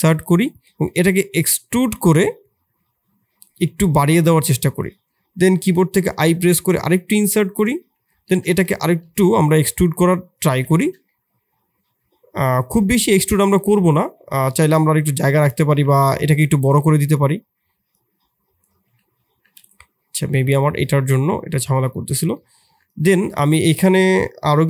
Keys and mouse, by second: 1.7 e, 8.1 e, 10.7 shift+click, 11.1-13.5 middle drag, 15.7 Tab, 16.3 Tab, 17.1 click, 17.9 click, 18.8 Tab, 19.4 Tab, 20.9 click, 22.3 click, 22.6 Tab, 22.8 click, 23.1 Tab.